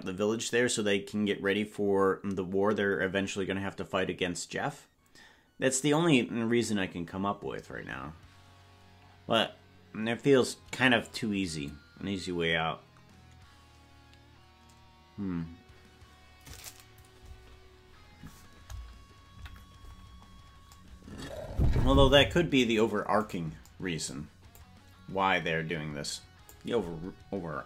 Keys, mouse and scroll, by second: 19.3 KP_Decimal, 19.9-20.8 scroll down 10, 23.3 right click, 24.5-27.6 drag.